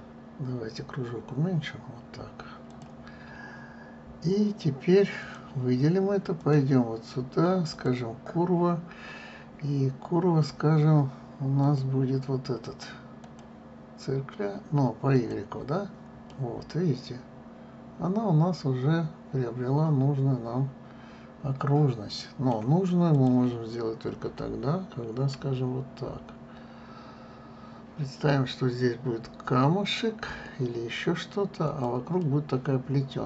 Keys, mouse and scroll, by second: 0.5 s, 4.1 scroll, 5.9 click, 7.1-10.1 drag, 12.3-15.3 drag, 15.8 click, 17.0-20.0 middle drag, 23.8 click, 26.0 s, 32.9-33.2 middle drag.